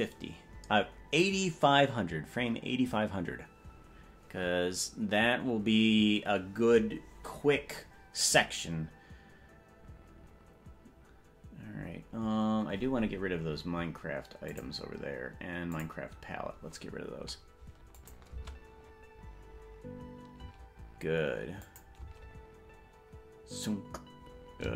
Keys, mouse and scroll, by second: 15.5 click, 16.4 click, 18.1 click, 18.5 space, 20.7 space, 21.8 click, 22.1 space.